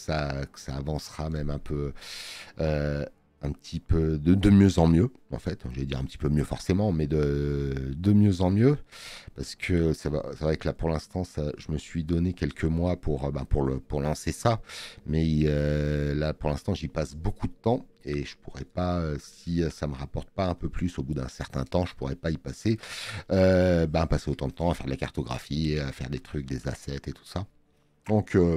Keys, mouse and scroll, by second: 2.1 space, 2.3 click.